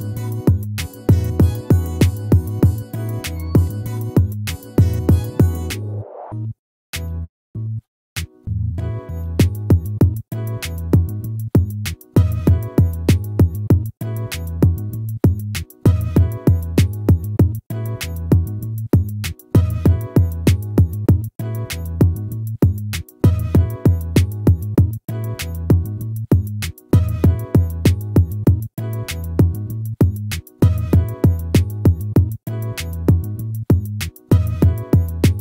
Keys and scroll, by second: 7.4 ctrl+-.